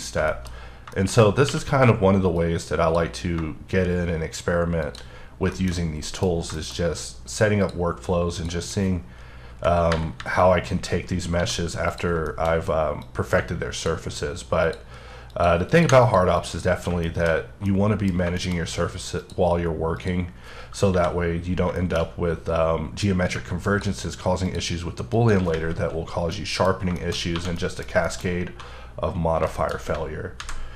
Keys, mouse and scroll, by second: 0.3 shift+middle click, 0.5-1.4 scroll up 5, 0.9 shift+middle click, 1.5 q, 2.4 click, 5.2-6.5 scroll down 9, 5.5 shift+middle click, 6.0 middle click, 6.5 shift+middle click, 6.9-7.6 scroll down 1, 7.6 click, 8.4 click, 10.2 KP_7, 11.0-11.4 scroll up 2, 11.4 d, 11.9 click, 12.3 shift+middle click, 13.1 click, 15.3 ctrl+double click, 15.7 ctrl+click, 16.0 click, 16.4 click, 17.1 shift+middle click, 17.4-17.7 scroll down 1, 17.7 middle click, 18.1 scroll down 1, 18.4 middle click, 19.2 click, 20.0 click, 20.9 KP_7, 21.8 shift+middle click, 22.0 scroll up 1, 23.0 click, 25.2 ctrl+double click, 26.1-27.3 scroll down 6, 26.3 middle click, 27.0 shift+middle click, 27.3 1, 27.6 middle click, 28.1 double middle click, 29.5 shift+middle click, 30.4 alt+v.